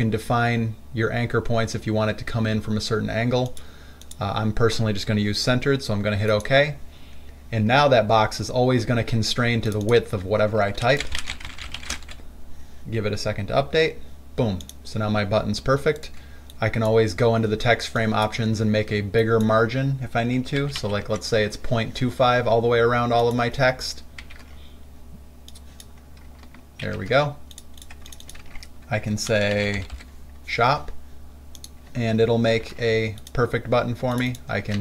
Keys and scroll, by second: 11.1-12.7 typing, 21.3 Tab, 24.5 ctrl+alt+c, 27.1 ctrl+alt+c, 28.6 ctrl+a, 29.6-30.7 typing, 32.8 ctrl+alt+c.